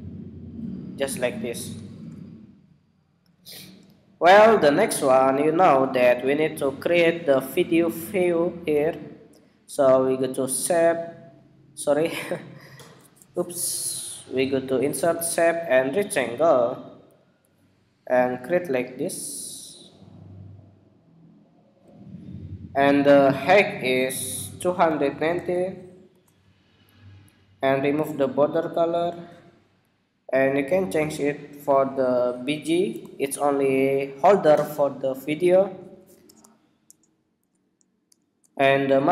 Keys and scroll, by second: 1.9 super+-, 36.3 alt+shift+Up.